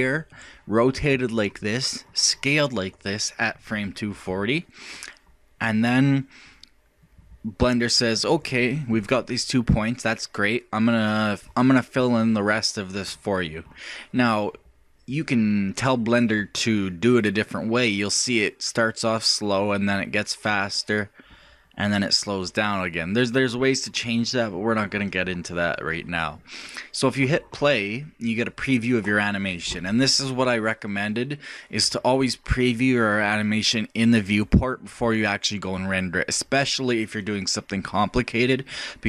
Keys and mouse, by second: 11.5-13.3 drag.